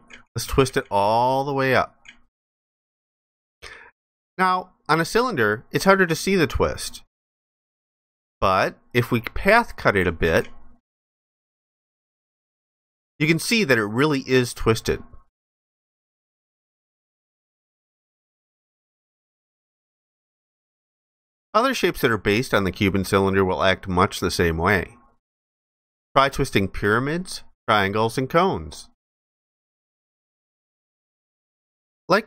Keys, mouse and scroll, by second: 4.4 alt+click, 7.7 alt+click, 12.5 alt+click, 17.8 alt+click.